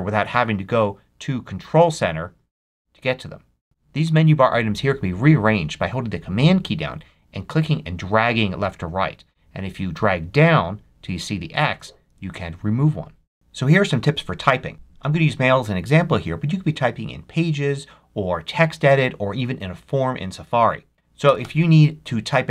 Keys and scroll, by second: 21.1 Return.